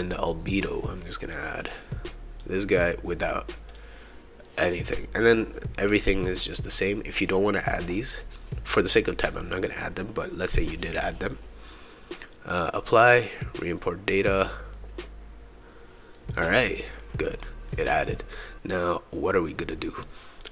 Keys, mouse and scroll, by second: 1.3-2.6 drag, 2.7 click, 3.7 click, 12.5 click, 13.0 click, 14.2 click, 16.1 right click.